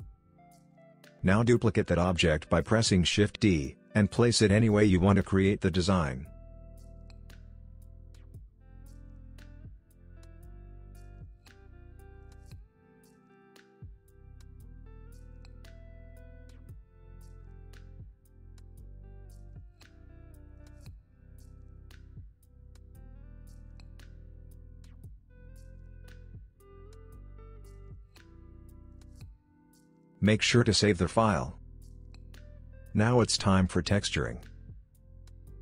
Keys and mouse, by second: 0.3 g, 0.9 middle click, 1.1 click, 1.2 middle click, 1.4 middle click, 2.0 shift+d, 4.0 g, 4.8 middle click, 5.1 KP_3, 5.4 r, 7.0 r, 8.3 g, 9.6 s, 10.4 g, 10.9 middle click, 11.4 middle click, 11.7 s, 12.6 middle click, 12.8 middle click, 13.6 middle click, 14.0 g, 14.4 r, 15.8 g, 16.6 middle click, 17.1 shift+middle click, 17.5 r, 18.5 middle click, 18.8 g, 19.6 middle click, 20.3 shift+middle click, 21.4 click, 21.7 click, 22.0 click, 22.2 Tab, 22.3 middle click, 23.4 middle click, 23.8 g, 24.8 middle click, 25.5 g, 26.1 middle click, 27.0 Tab, 27.1 middle click, 27.3 middle click, 27.5 KP_3, 28.0 middle click, 28.6 shift+d.